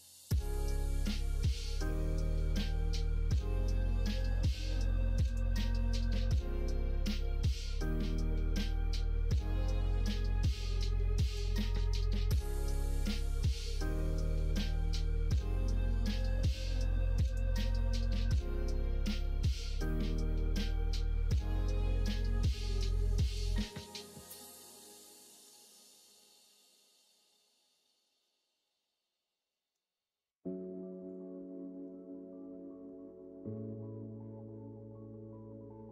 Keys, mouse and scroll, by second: 1.3 click, 2.0 middle click, 2.8-4.0 middle drag, 5.3-10.0 drag, 10.5 middle click, 11.5-13.0 middle drag, 13.9 middle click, 15.0-16.9 middle drag, 17.3-20.3 middle drag, 21.7-25.5 drag, 28.1-29.7 middle drag, 31.0-35.9 drag.